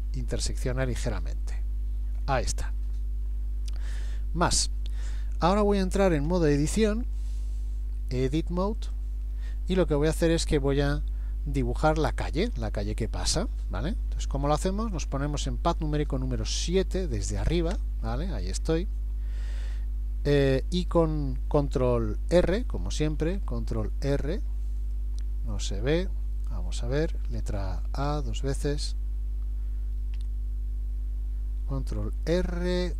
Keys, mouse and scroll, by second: 0.6 middle click, 2.2-2.7 scroll down 1, 2.9-4.7 scroll down 12, 4.7-5.3 scroll up 2, 7.2 click, 16.5 KP_7, 18.6 scroll down 1, 19.5-20.0 scroll down 2, 23.2 ctrl+r, 25.6 middle click, 27.5 a, 27.9 a, 28.1 a, 30.2 Escape.